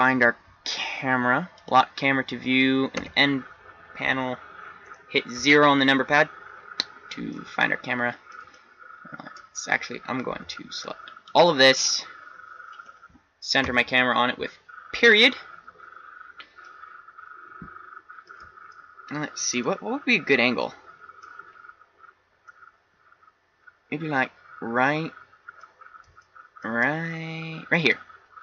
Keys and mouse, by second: 3.0 n, 5.4 KP_0, 10.4 b, 13.7 KP_Decimal, 21.8 middle click, 22.9 middle click, 23.4 middle click, 23.6 middle click, 24.2 middle click, 24.4 middle click, 25.2 middle click, 26.2 middle click.